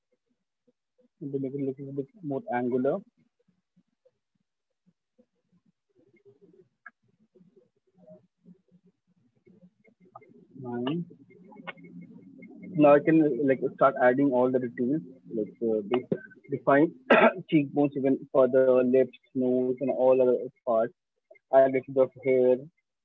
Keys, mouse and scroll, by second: 0.0-0.9 drag, 1.0 click, 1.7 click, 2.3 click, 2.7 click, 4.4 click, 6.1 right click, 7.1 alt+click, 7.5 shift+click, 9.6 9, 14.7-19.5 drag.